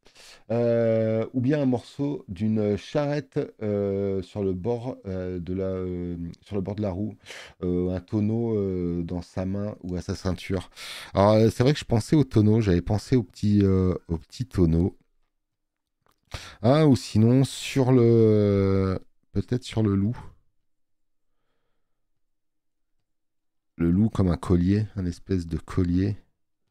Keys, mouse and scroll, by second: 15.4 space, 15.6 click, 25.9 e.